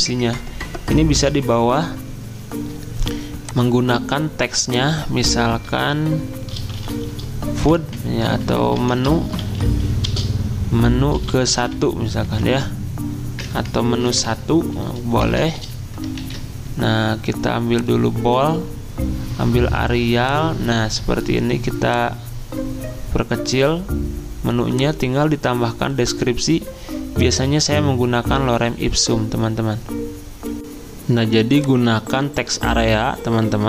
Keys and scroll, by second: 6.3-15.6 typing, 8.8 Caps_Lock, 16.2 ctrl+a, 30.6 alt+Tab, 30.6 F9, 31.4 F9.